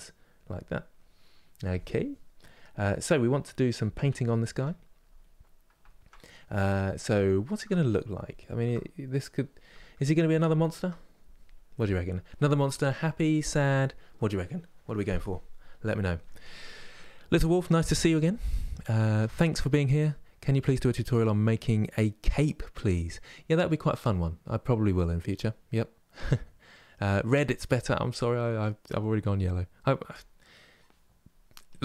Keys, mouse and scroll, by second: 3.1-31.4 middle drag, 31.4-31.8 drag.